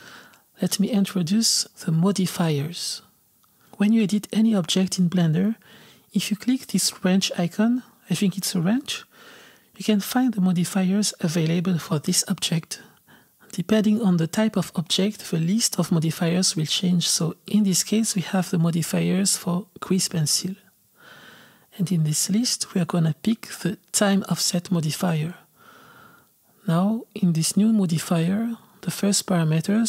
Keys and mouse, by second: 16.0-26.6 drag.